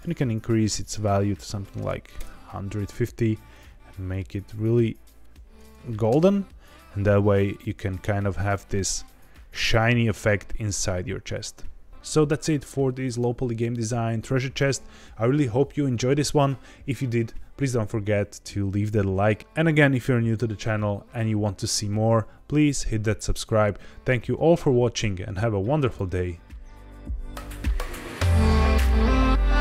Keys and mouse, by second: 0.7-2.2 drag, 3.4 click, 6.0 KP_0, 7.7 z.